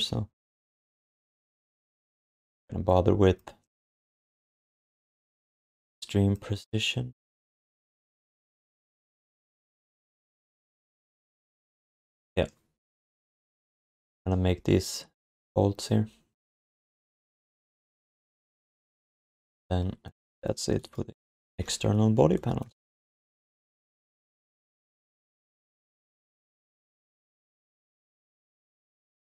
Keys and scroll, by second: 17.9 ctrl+s, 23.8 ctrl+s.